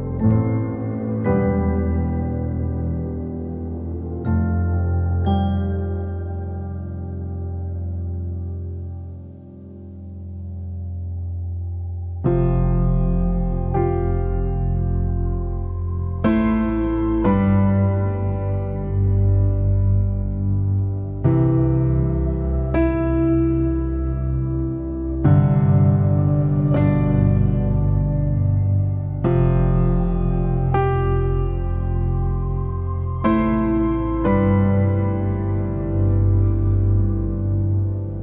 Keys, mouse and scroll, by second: 0.2 ctrl+z, 0.8 f, 1.8 middle click, 2.4 f, 3.4-12.3 drag, 12.3-13.3 middle drag, 13.3-15.6 drag, 15.6 middle click, 16.6-24.0 drag, 24.0 f, 25.1-27.2 drag, 27.2 alt+middle click, 27.5 alt+middle click, 28.1-29.4 drag, 29.4 alt+middle click, 30.0 alt+middle click, 30.9 alt+middle click, 32.0-38.2 drag.